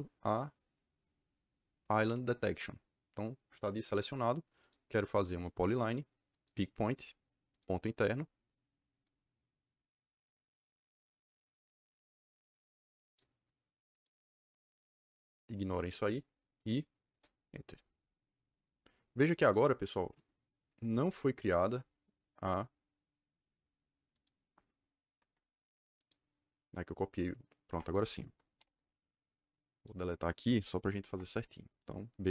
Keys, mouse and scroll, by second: 2.0 click, 4.5 click, 5.3 click, 6.2 click, 7.4 click, 9.0 click, 10.2-13.1 drag, 13.8 click, 17.0 KP_Enter, 19.3 click, 20.7 Delete, 24.1 click, 25.1 Delete, 25.9 click, 27.6 Delete, 28.5 u, 28.6 Return, 29.7 click, 31.0 Delete, 31.9-32.3 typing.